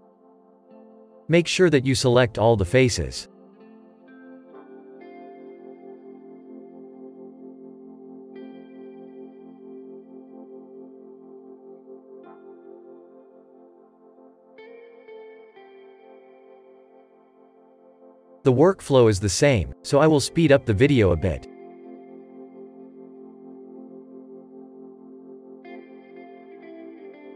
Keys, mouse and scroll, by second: 0.5 Tab, 0.7-1.2 scroll up 4, 1.2-3.2 shift+middle drag, 3.2 click, 5.1 click, 5.9 Tab, 6.5-7.6 shift+middle drag, 7.6 Tab, 8.4 click, 9.9 click, 10.4 Tab, 11.0 scroll down 2, 11.4-13.3 shift+middle drag, 13.3-13.6 scroll up 5, 13.6-14.6 middle drag, 14.6 click, 16.5 click, 17.2 click, 18.7 click, 20.5 click, 21.5 Tab, 21.7 shift+middle click, 21.9 scroll up 4, 22.0 shift+middle click, 22.7 click, 23.5 shift+middle click, 23.9 middle click, 24.2 ctrl+KP_Add, 25.2 shift+middle click, 25.8-27.0 drag, 27.0 shift+middle click.